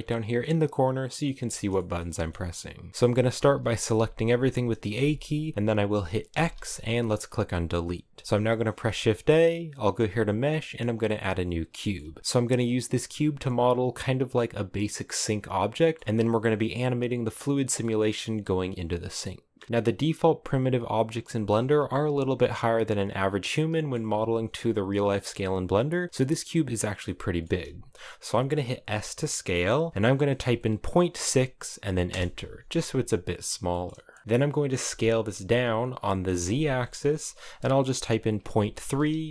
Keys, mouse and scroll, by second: 0.2-3.6 middle drag, 3.6 a, 5.9 x, 7.9 middle click, 8.1 scroll up 2, 8.4 shift+a, 11.6 shift+middle click, 11.7-12.2 scroll up 2, 12.2-15.2 middle drag, 15.2 scroll down 2, 15.4 middle click, 17.3-28.6 middle drag, 28.6 s, 32.6-33.2 scroll up 5, 33.3-34.5 shift+middle drag, 34.5 s.